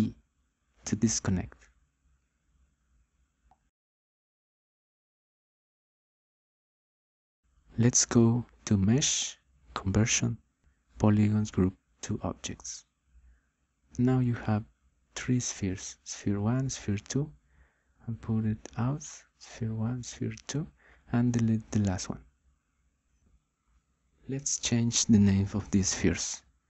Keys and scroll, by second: 0.5 u, 1.5 d, 24.1 Delete.